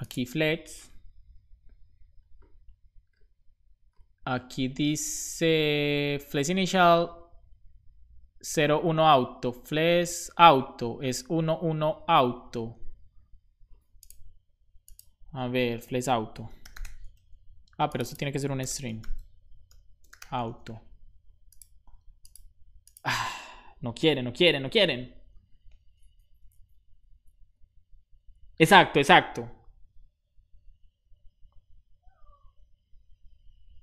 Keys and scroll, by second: 16.2-17.2 typing, 18.6 space, 19.6 o, 20.3 super+s.